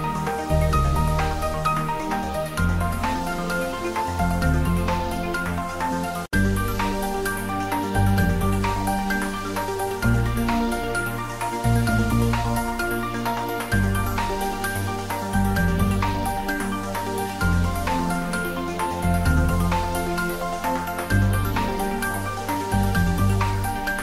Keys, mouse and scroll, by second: 0.1-1.1 typing, 1.8 Return, 2.5 click, 2.8-5.4 typing, 4.5 click, 4.7 ctrl+middle click, 5.7 click, 6.5 g, 7.7 click, 8.2 s, 8.6 click, 10.0 middle click, 10.3 middle click, 10.6 ctrl+middle click, 11.0 middle click, 11.7 ctrl+z, 12.4 ctrl+middle click, 12.7 ctrl+middle click, 13.4 ctrl+click, 14.1-15.7 typing, 16.2 click, 16.5 ctrl+z, 17.2-18.5 typing, 18.2 click, 18.7 ctrl+z, 19.1 middle click, 19.6-24.0 typing, 21.3 click.